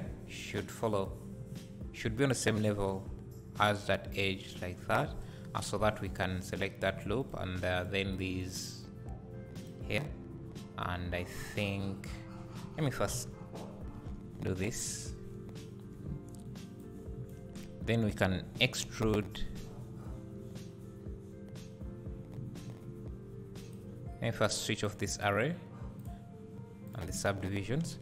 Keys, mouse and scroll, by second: 0.9 click, 2.5-6.2 drag, 5.1 3, 7.2 shift+click, 7.8 shift+click, 8.1 shift+click, 8.4 shift+click, 9.5 shift+click, 12.9 Tab, 13.3 KP_Divide, 14.3 Tab, 14.5-14.9 scroll up 1, 16.8-23.7 drag, 17.6-18.8 scroll up 1, 19.3 e, 24.8 click, 26.9 click.